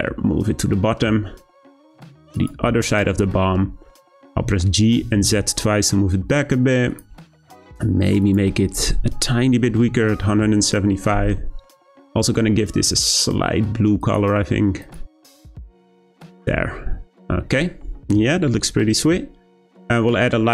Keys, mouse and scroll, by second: 3.5-4.3 scroll down 1, 4.3 g, 8.2-11.2 drag, 12.0 click, 16.3 click, 16.8-18.4 scroll up 2, 18.4-19.0 scroll up 1, 19.0-19.8 scroll up 1, 19.8-20.5 scroll down 1.